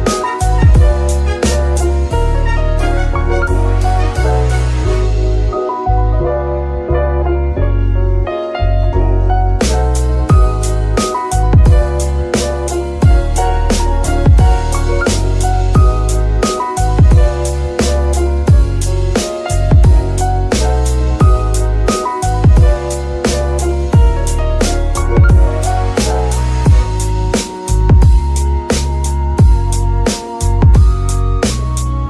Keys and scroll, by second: 0.9 KP_3, 1.5 g, 1.7 y, 2.8 g, 3.9 z, 7.1 s, 7.4 y, 15.5-18.6 typing, 25.7 shift+g.